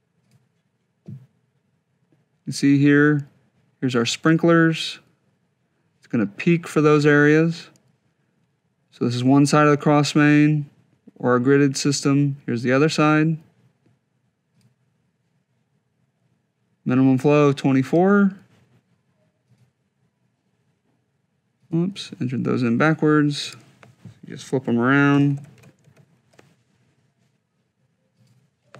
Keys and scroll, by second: 24.9 shift+b, 25.2 shift+i, 26.1 Tab.